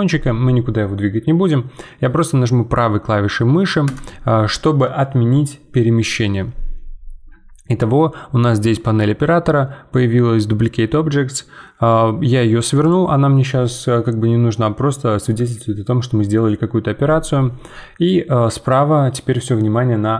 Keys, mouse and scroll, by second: 8.6-20.1 drag.